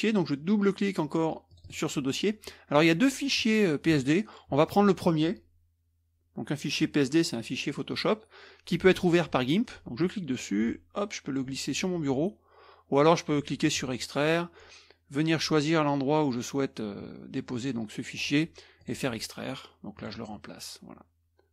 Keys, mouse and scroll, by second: 1.5 click, 2.7 click, 3.4-4.4 drag, 10.0-11.5 drag, 13.6 click, 18.8 click, 20.0 drag.